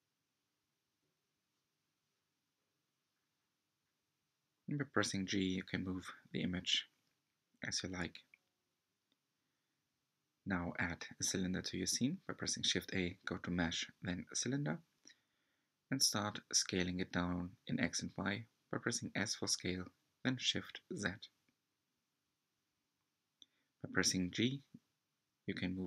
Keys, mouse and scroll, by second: 4.3 click, 5.1 shift+a, 17.8 g, 23.8 Tab.